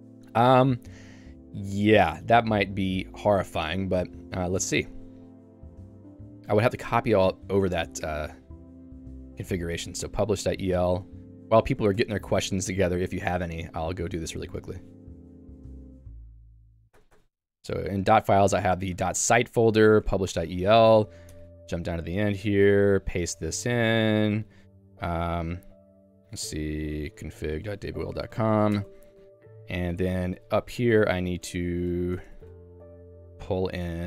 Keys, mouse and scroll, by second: 1.1 click, 4.0 Escape, 11.1 Return, 11.8-14.6 typing, 12.0 Escape, 20.6 Return, 21.1-29.6 typing, 21.3 Escape, 30.7-32.9 typing, 31.2 ctrl+d.